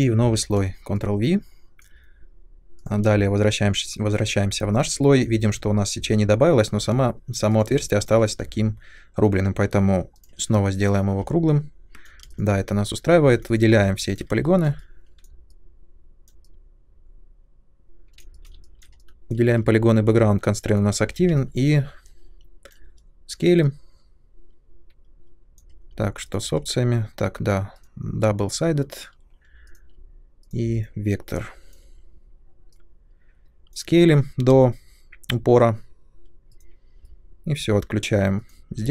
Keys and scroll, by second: 0.1 ctrl+v, 4.4 2, 12.2 space, 13.2 3, 20.9 r, 34.5 space.